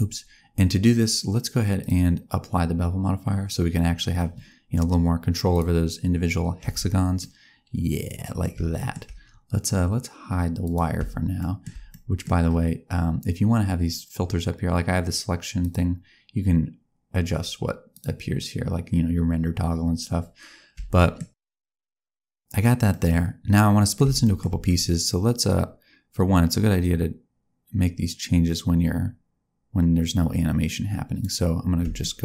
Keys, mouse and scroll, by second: 1.7 click, 5.4 click, 6.5 Tab, 7.1 middle click, 8.7 shift+middle click, 10.6 click, 11.3 shift+middle click, 11.8 middle click, 15.5 click, 17.8 click, 20.9 shift+middle click, 21.5 shift+middle click, 22.8 middle click, 24.2 shift+middle click, 25.2 click, 31.9 shift+middle click.